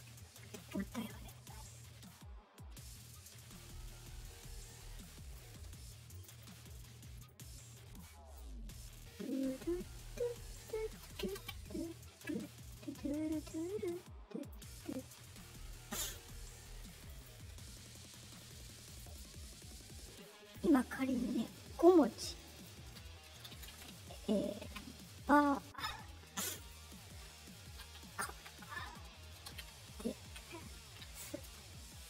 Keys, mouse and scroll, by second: 0.9 middle click, 0.9-1.3 scroll up 2, 4.6 click, 6.0 click, 6.2 click, 7.2-8.3 drag, 10.5 click, 11.1 ctrl+c, 12.6-14.5 drag, 15.0-15.9 drag, 16.9 click, 17.1 click, 18.8 click, 19.0 click, 20.0 click, 22.3 click, 22.5 click, 24.6 Return, 26.3 click, 26.5 click, 28.2 Tab, 31.4 space.